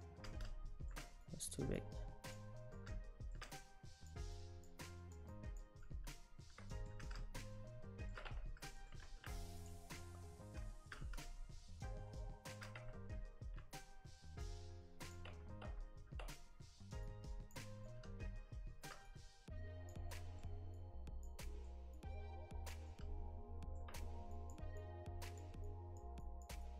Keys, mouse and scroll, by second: 0.3 middle click, 1.3 click, 1.8 click, 2.8 middle click, 3.6 click, 4.4 click, 5.3 click, 5.8 middle click, 6.7 shift+middle click, 7.1 middle click, 8.3 Tab, 8.8 shift+middle click, 9.1 shift+d, 10.7 shift+middle click, 11.0 middle click, 12.8 Tab, 13.6 Tab, 14.5 click, 15.3 Tab, 15.7 Tab, 17.1 click, 17.9 middle click, 19.1 click, 20.1 middle click, 20.8 click, 21.5 middle click, 22.0 click, 22.9 middle click, 24.4 click, 24.8 click, 26.3 click.